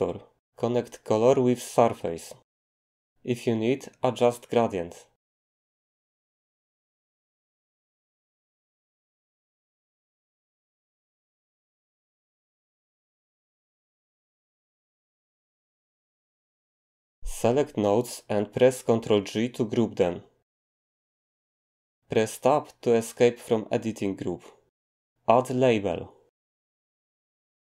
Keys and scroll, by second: 20.7 ctrl+g, 23.2 Tab, 26.1-27.7 typing.